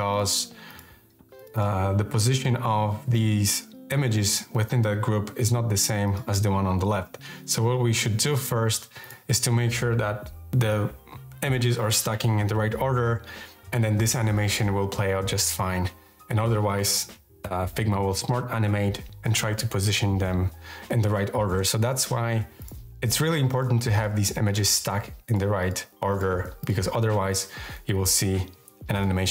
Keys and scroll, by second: 28.1 Left.